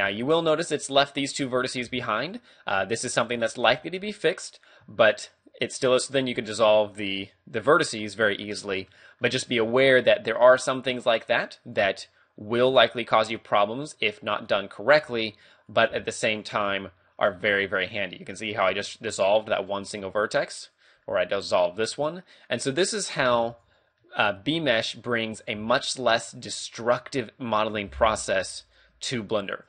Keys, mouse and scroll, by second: 0.8 right click, 1.2 shift+right click, 1.9-3.8 typing, 2.2 right click, 3.3 right click, 4.5 right click, 5.2 shift+right click, 6.4 x, 8.0 middle click, 8.9 middle click, 9.6 a, 10.0 a, 11.8 right click, 12.5 a, 14.4 right click, 15.1 a, 15.5 right click, 15.9 x, 17.3 middle click, 20.8 right click, 21.0 x, 22.4 right click, 23.3 x, 24.0 middle click, 25.5 right click, 25.5 x, 26.7 right click, 27.7 shift+right click, 28.1 j, 28.6 right click, 29.4 shift+right click.